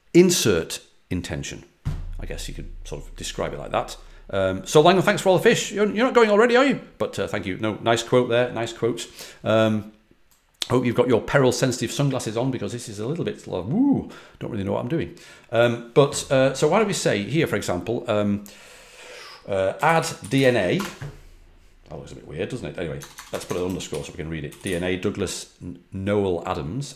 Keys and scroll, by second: 19.5-20.8 typing, 22.7-25.1 typing.